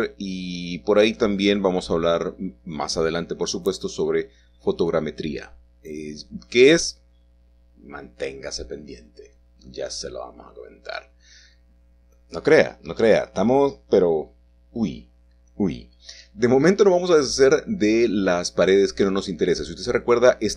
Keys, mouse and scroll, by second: 2.0 ⇄, 3.3 click, 4.0 shift+click, 5.6 shift+middle click, 7.0-9.1 shift+middle drag, 9.1-10.1 scroll down 2, 15.0-15.6 scroll up 2, 15.6-17.0 middle drag, 19.1 a, 19.3 a.